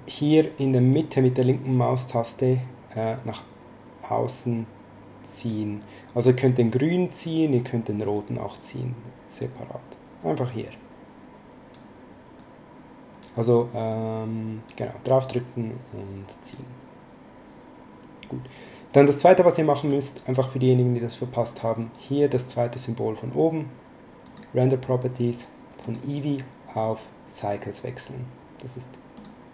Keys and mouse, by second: 0.9 click, 6.4 click, 8.1 click, 10.7 click, 12.3 click, 13.9 click, 15.3 click, 24.2 click, 25.8 click, 29.1 click.